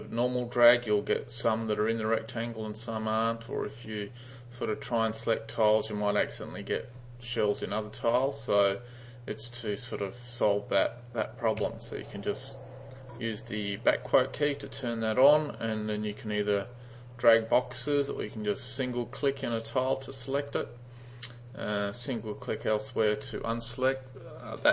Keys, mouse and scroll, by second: 4.7-5.9 drag, 9.5 click, 16.9-17.6 drag, 18.5 click, 19.3 click, 20.6 click, 21.9 click.